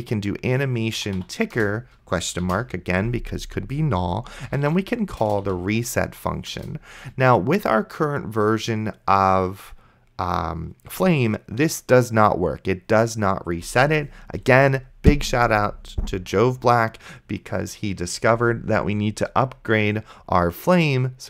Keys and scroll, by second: 1.2 i, 1.6 Return, 2.7 shift+/, 4.2-5.5 typing, 6.6 Return, 14.7 ctrl+s.